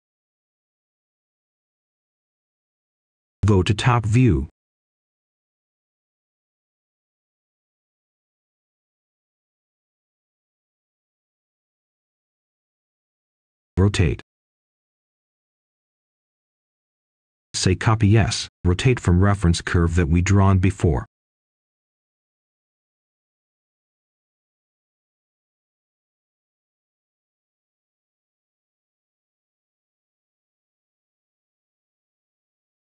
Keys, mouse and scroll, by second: 4.5 click, 5.4-6.2 scroll down 1, 6.2-7.2 right drag, 7.3-8.0 scroll up 1, 8.0 click, 8.6 scroll up 1, 10.7 shift+click, 11.5-12.5 scroll down 1, 12.5-13.6 scroll up 1, 13.6 r, 15.1 Return, 17.1-18.2 drag, 18.4-19.7 scroll up 1, 19.7 click, 20.1-21.9 scroll down 1, 21.9 click, 22.8 right click, 23.7-24.8 scroll up 1, 24.8 click, 25.7-28.1 scroll down 1, 28.1-30.7 scroll up 1, 32.7 click.